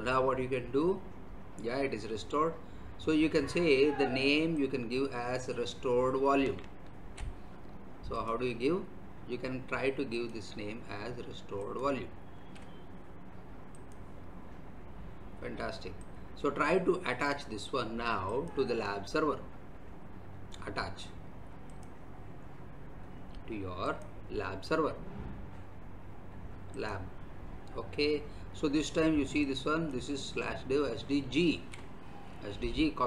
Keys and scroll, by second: 6.8 ctrl+c, 12.3 ctrl+v, 31.4 ctrl+c.